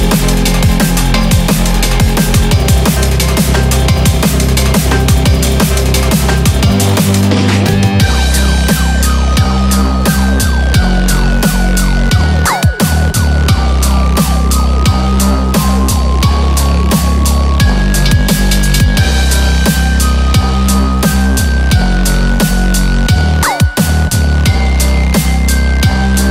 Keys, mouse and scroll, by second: 0.9 2, 1.4 click, 1.4 scroll down 2, 2.2 3, 2.3 click, 3.1 g, 8.0 alt+click, 10.7 alt+shift+click, 12.3 g, 17.6 click, 17.9 scroll down 2, 18.1 middle click, 19.2 middle click, 19.8 i.